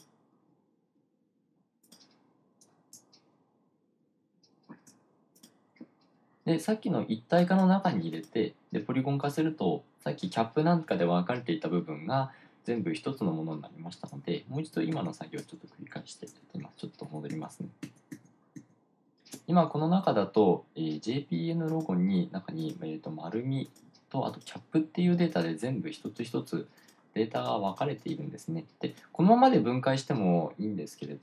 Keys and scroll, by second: 14.9 super+z, 15.1 super+z, 15.3 super+z, 16.9 super+z, 17.1 super+z, 17.3 super+z, 17.5 super+z, 17.9 super+z, 18.7 super+z.